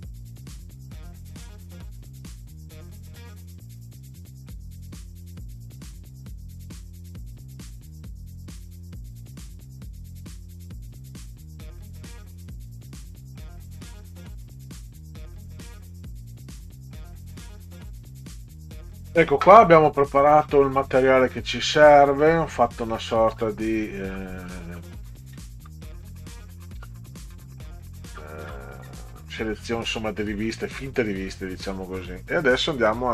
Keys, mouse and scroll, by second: 0.1 click, 0.7 Return, 1.0 click, 2.3 click, 3.1-4.4 typing, 5.3 Delete, 7.8 click, 8.1 scroll down 2, 8.5 click, 8.8-9.1 scroll down 2, 9.2 click, 9.5 click, 10.0 click, 10.7 click, 11.6 click, 12.6 click, 15.4-15.7 scroll up 2, 18.2 click, 19.0 scroll down 2, 19.5-24.0 scroll down 30, 24.4-25.7 scroll down 10, 26.4-30.5 scroll down 24, 31.1 scroll down 2, 31.6 scroll down 2, 32.3 Down.